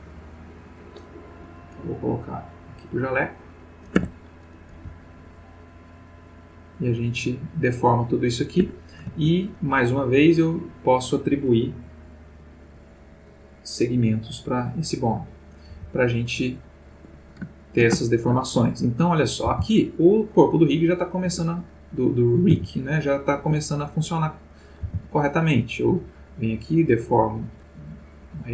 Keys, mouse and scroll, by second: 2.4 click, 3.9 Tab, 4.4 click, 4.8 g, 8.6 Escape, 10.2 click, 12.5 click, 13.8 click, 14.4 click, 15.4 click, 15.7 g, 17.0 Escape, 17.5-18.5 ctrl+middle drag, 19.0 click, 19.4 r, 21.3 Escape, 22.0 click, 22.6 r, 23.4 Escape, 24.2 click, 24.8 r.